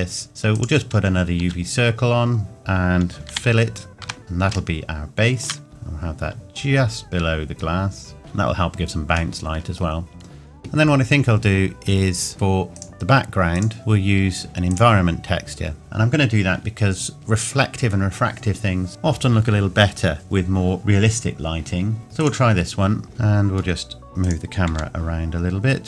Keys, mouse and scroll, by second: 0.6 click, 1.4 s, 2.5 Tab, 3.3 f, 4.2-4.6 scroll up 1, 4.8 shift+middle click, 5.7 g, 8.2-9.4 scroll down 1, 9.4 middle click, 9.7 middle click, 9.8 scroll down 1, 12.8 click, 22.2 click, 23.1 g, 23.2 middle click, 24.2 click, 24.7 g.